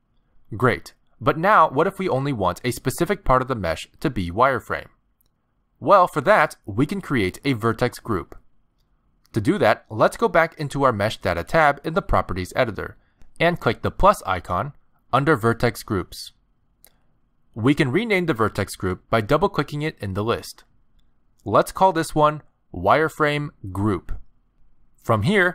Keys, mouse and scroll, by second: 12.1 click, 14.2 click, 17.2 click, 17.3 click.